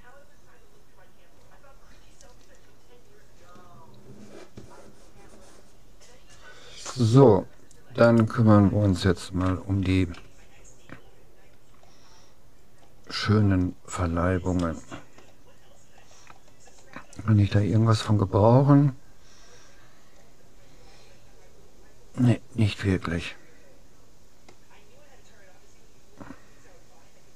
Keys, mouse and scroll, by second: 8.1-9.7 right drag, 9.5 Tab, 10.3 a, 13.1-14.3 middle drag, 14.7-16.5 middle drag, 17.5-19.9 middle drag.